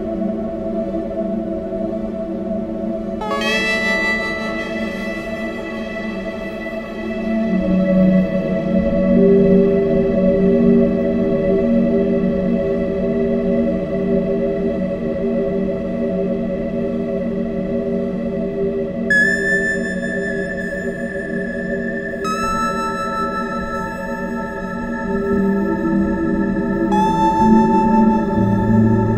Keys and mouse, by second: 2.3 ctrl+z, 4.6 e, 25.7 shift+r.